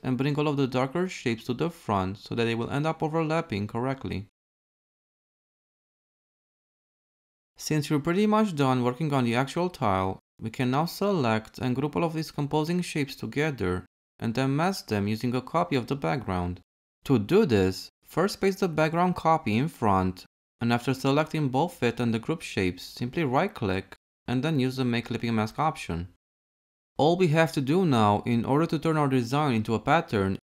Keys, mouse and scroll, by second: 10.0 ctrl+a, 11.7 ctrl+g, 15.1 ctrl+c, 18.3 ctrl+f.